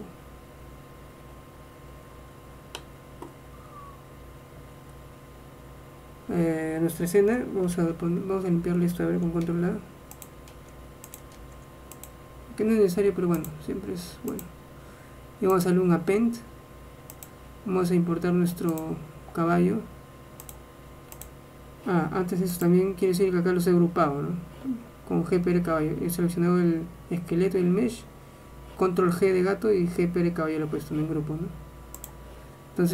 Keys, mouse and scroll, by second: 0.9 middle click, 1.9 middle click, 3.2-7.9 middle drag, 7.9 shift+a, 9.5 ctrl+a, 11.3 ctrl+a, 12.2 ctrl+a, 13.5-15.5 drag, 15.7-17.2 drag.